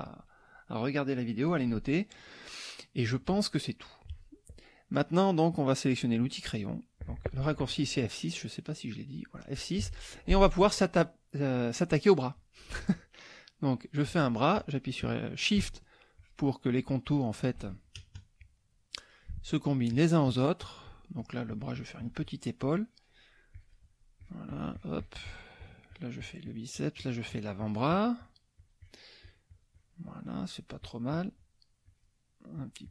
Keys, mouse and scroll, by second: 2.7 middle click, 3.5 middle click, 6.2 click, 8.2 middle click, 8.7 middle click, 9.8 F6, 10.3 click, 14.1 click, 16.1 shift+click, 16.7 shift+click, 17.1 shift+click, 18.0 shift+KP_Add, 18.5 click, 19.9 shift+click, 21.2-23.4 shift+drag, 23.5 shift+click, 24.2-25.5 shift+drag, 25.6-29.1 shift+drag, 29.2-30.8 shift+drag, 30.8-31.4 shift+drag, 31.8 shift+click, 32.5 shift+click.